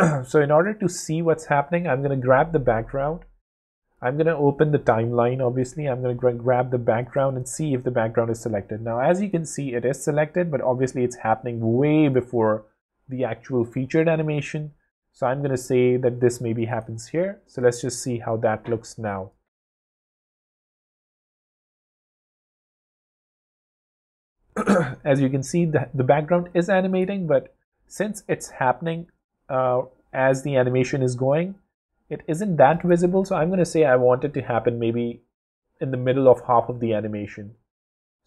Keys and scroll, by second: 19.4 w, 33.0 w.